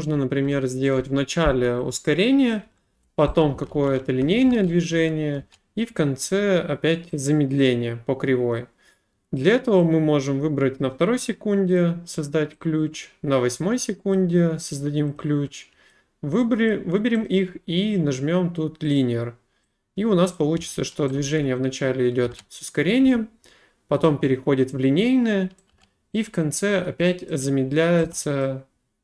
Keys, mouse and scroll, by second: 0.1-2.1 typing, 0.9 middle click, 1.4 scroll, 2.5 click, 2.6 Delete, 3.5-5.4 scroll, 6.2 right click, 9.8 click, 11.7 click, 14.1 click, 15.1 click, 16.7 click, 17.2 right click, 18.9 click, 20.3 click, 20.5-23.0 typing, 24.0 right click, 25.5-26.2 typing, 27.3 right click, 28.0 a, 28.4 right click.